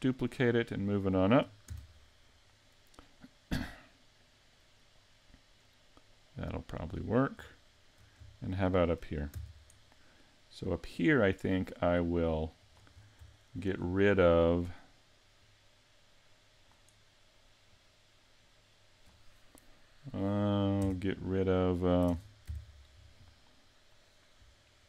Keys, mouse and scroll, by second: 1.7 shift+d, 6.8 click, 7.5 shift+middle click, 8.3 shift+middle click, 9.3 shift+d, 12.7 click, 12.9-13.3 scroll up 3, 13.3 shift+middle click, 13.8-14.2 scroll up 2, 15.4 click, 17.7 click, 20.8 Tab, 22.1 ctrl+Tab.